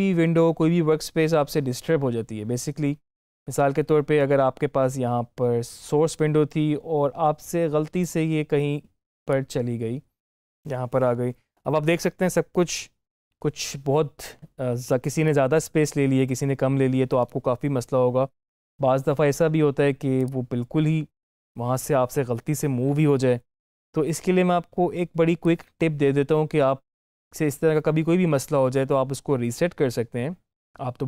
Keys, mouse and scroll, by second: 7.9-11.7 drag, 15.1-18.3 drag, 20.1 click, 24.0-27.7 drag.